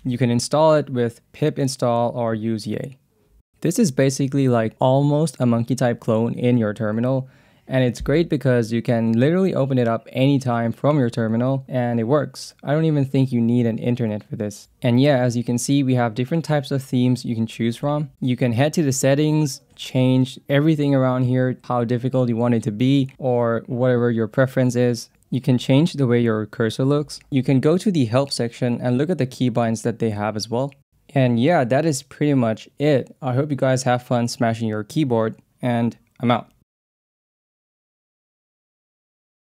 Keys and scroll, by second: 1.8 Down, 3.4 Tab, 5.9-7.2 typing, 8.2 Down, 8.4 Return, 10.0 q, 10.5 BackSpace, 11.6 Return, 12.7 Escape, 20.6 Down, 21.1 Up, 21.4 Down, 21.7 Up, 22.0 Down, 22.8 Down, 23.7 Up, 25.1 Down, 26.9 shift+Tab, 30.7-36.6 typing.